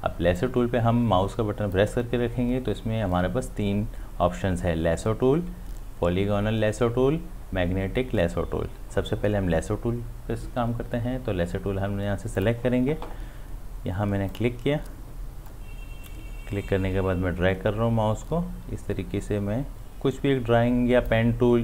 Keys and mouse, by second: 0.4-4.1 drag, 12.4-21.6 drag.